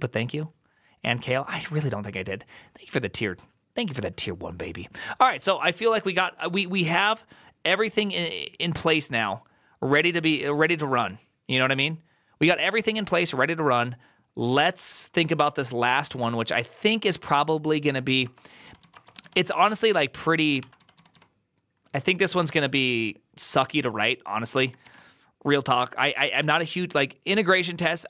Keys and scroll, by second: 15.3 alt+{, 15.3 ctrl+c, 15.7 k, 15.9 k, 16.1 Return, 17.4-21.5 typing, 18.1 Return, 26.3 %.